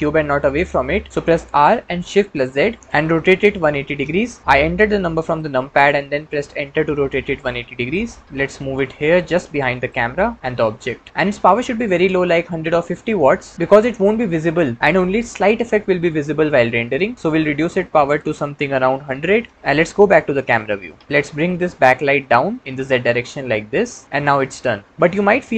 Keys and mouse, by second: 1.4 r, 2.2 shift+z, 3.3 KP_1, 3.5 KP_8, 3.7 KP_0, 8.2 g, 18.0-19.5 drag, 19.3 KP_0, 20.3 KP_0, 21.3 g, 22.4 z.